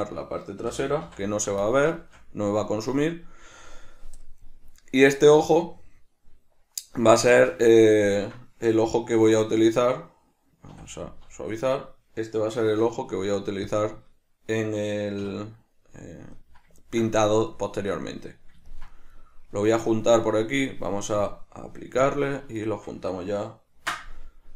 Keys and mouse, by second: 0.3 click, 2.1 shift+middle click, 13.8 Tab, 15.3-21.4 middle drag, 15.3 \, 21.4 drag, 22.1-22.7 drag, 22.7 shift+right click.